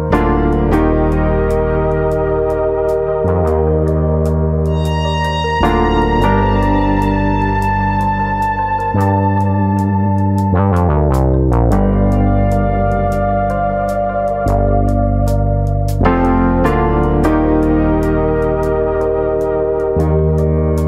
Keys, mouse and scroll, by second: 0.4 middle click, 1.2 shift+middle click, 1.8 2, 2.5 middle click, 2.5 click, 3.1 click, 3.5 click, 3.9 middle click, 4.3 scroll up 2, 4.5 middle click, 5.0 ctrl+click, 5.3 ctrl+click, 5.3 middle click, 6.0 shift+middle click, 6.3 scroll up 2, 9.2 ctrl+b, 17.7 click, 18.1 middle click, 18.6-19.2 scroll up 1, 19.2 click, 20.0 shift+click, 20.5 middle click.